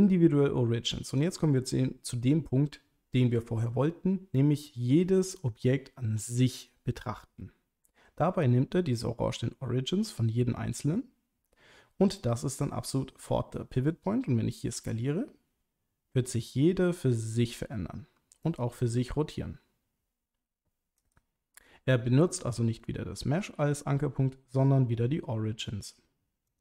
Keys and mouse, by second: 14.7 s, 18.4 right click, 19.0 r, 21.0 right click.